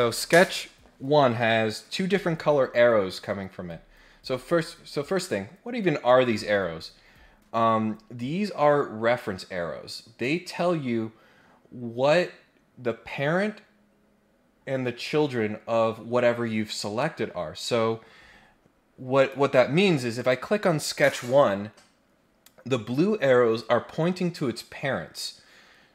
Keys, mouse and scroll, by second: 19.2 click, 20.1 click.